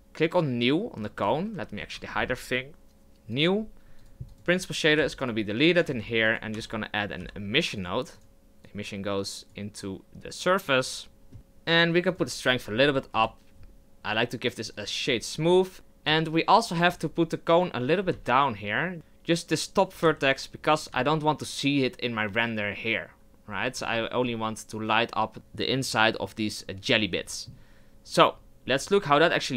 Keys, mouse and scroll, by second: 1.7 shift+h, 3.4-4.9 drag, 4.9 x, 10.6 click, 13.1-14.8 drag, 14.8 w, 15.4 Tab, 15.7 click, 16.1 Tab, 17.1 z, 17.5 right click, 18.0 g, 18.9 g, 19.9 g, 21.1 z, 23.7 Tab, 28.8 click.